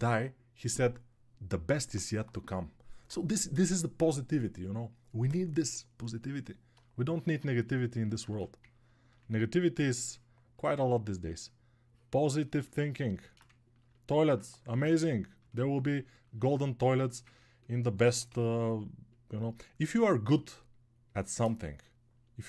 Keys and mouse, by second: 7.1 alt+click, 7.1 alt+middle click, 7.1 alt+right click, 8.6 ctrl+1.